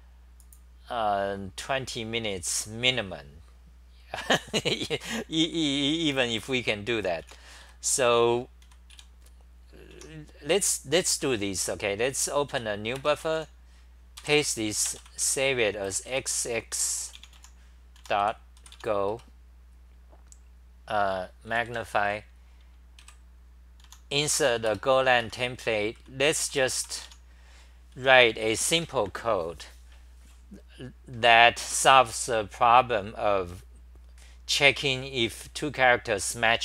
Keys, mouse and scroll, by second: 4.4 d, 7.2-8.9 typing, 10.0 Home, 13.4 4, 14.2 k, 16.8 Home, 18.0 u, 19.3 Return, 21.5 super+=, 23.0 i, 24.7 Return, 24.7-28.5 typing, 25.3 Home, 26.5 Return.